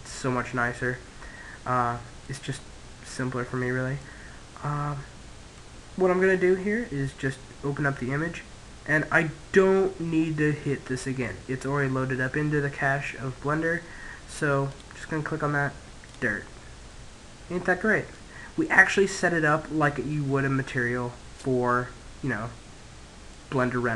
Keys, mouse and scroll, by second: 0.7-2.4 middle drag, 3.8-5.4 middle drag, 14.5 click, 16.6-18.4 middle drag, 18.9-20.7 middle drag, 23.3-23.9 middle drag.